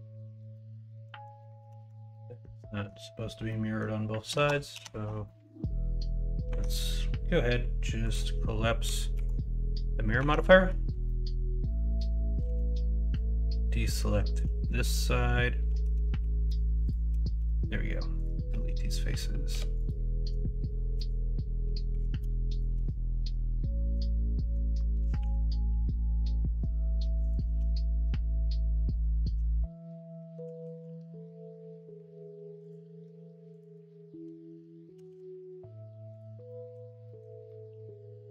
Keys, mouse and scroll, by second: 0.5-2.4 ctrl+z, 2.6 middle click, 3.4 middle click, 4.8 ctrl+z, 5.2 middle click, 6.4 Tab, 9.1 ctrl+a, 10.1 Tab, 10.4 middle click, 11.0 middle click, 12.3 c, 14.6 middle click, 16.1 3, 17.3 x, 19.5 2, 21.9 1, 22.5 click, 24.0 middle click, 25.0 s, 27.4 ctrl+z, 30.6 s, 34.9 g, 36.4 middle click, 37.0 scroll up 1, 37.1 middle click, 37.4-38.3 middle drag.